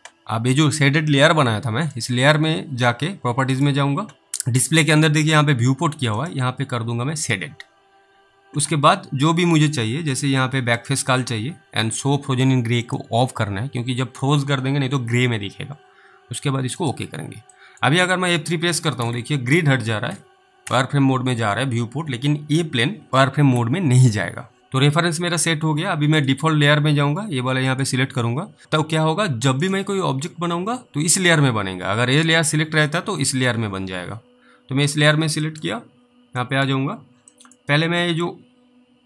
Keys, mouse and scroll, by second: 2.0 right click, 3.6 click, 6.1 click, 10.7 click, 16.7 click, 17.9 middle click, 18.4 F3, 19.0 F3, 19.5 F3, 24.6 click, 25.1 middle click, 26.2 click, 35.6 middle click, 35.9-36.2 scroll up 3, 36.7 middle click, 36.8 scroll up 2, 37.6 middle click, 37.6-38.0 scroll up 1, 38.3 middle click.